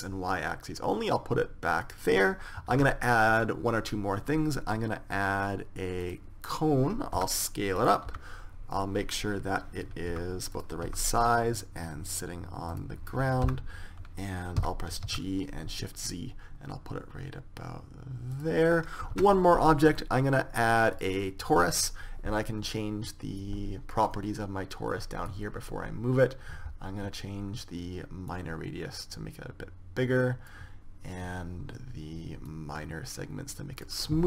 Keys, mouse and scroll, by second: 3.4 shift+a, 7.9 s, 8.8 KP_3, 10.8 s, 11.6 g, 14.2 KP_0, 15.3 g, 19.8 shift+a, 24.1 click, 25.9-27.6 drag, 29.2 click, 29.8-31.0 drag, 33.2-34.2 drag.